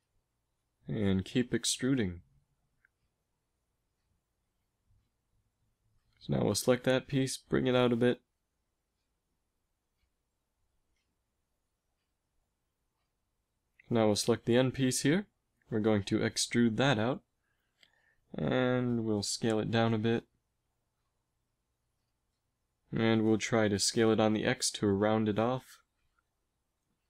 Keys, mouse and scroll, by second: 0.9 e, 2.6 s, 5.4 a, 5.7 b, 6.8 g, 11.3 z, 12.2 z, 13.7 b, 15.9 e, 18.0 s, 20.5 z, 22.8 s.